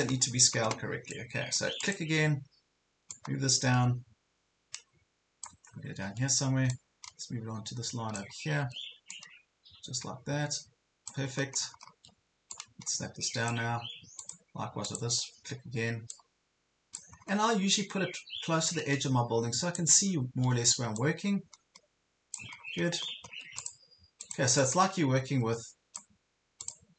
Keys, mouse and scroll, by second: 0.0 ctrl+scroll up 1, 1.2-5.6 drag, 5.6 ctrl+scroll up 1, 6.8-8.2 drag, 8.4 ctrl+scroll up 1, 9.1-11.1 drag, 11.3 ctrl+scroll down 1, 11.8 ctrl+scroll down 1, 12.5-17.1 drag, 17.2 ctrl+scroll up 1, 18.8-19.8 drag, 20.0 ctrl+scroll up 1, 21.0 click, 22.6 ctrl+scroll down 1, 23.6-26.6 drag.